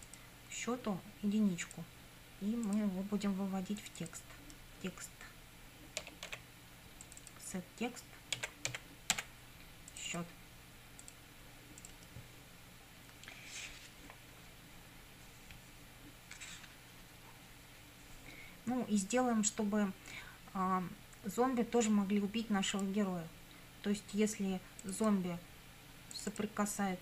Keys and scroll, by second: 6.0 t, 6.3 e, 8.1-9.7 typing.